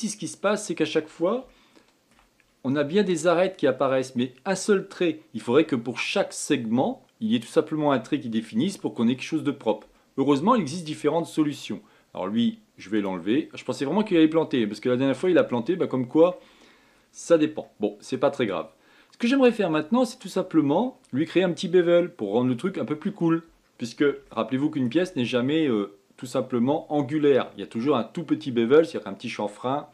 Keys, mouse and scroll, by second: 0.6-2.2 scroll up 4, 2.2 shift+middle click, 3.1-6.2 scroll up 2, 9.4-9.9 scroll down 2, 9.9-13.7 middle drag, 13.7 click, 14.3-14.9 scroll down 4, 14.9-19.5 shift+middle drag, 19.5-20.1 scroll up 2, 20.1-20.5 scroll down 2, 20.5 middle click, 21.2-22.9 scroll up 4, 22.9-23.4 scroll down 3, 23.4-28.1 middle drag.